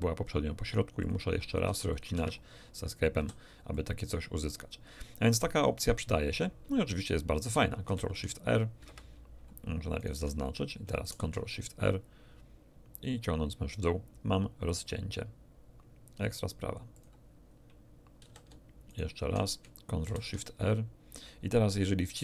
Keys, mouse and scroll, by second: 1.0 click, 1.6 ctrl+r, 1.9 ctrl+click, 2.1 Escape, 3.1 a, 3.7 click, 3.9 middle click, 4.1-5.4 drag, 5.4 middle click, 5.9 scroll up 2, 7.8 ctrl+shift+r, 8.8 Escape, 10.0 alt+shift+right click, 11.0 ctrl+shift+r, 16.9 click, 18.2 a, 18.8 alt+shift+click, 20.0 ctrl+shift+r.